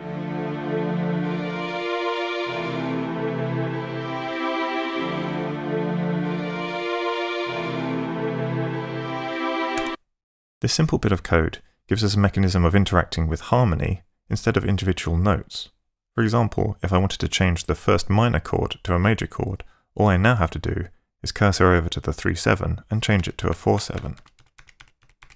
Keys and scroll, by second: 9.8 space, 23.2 Right.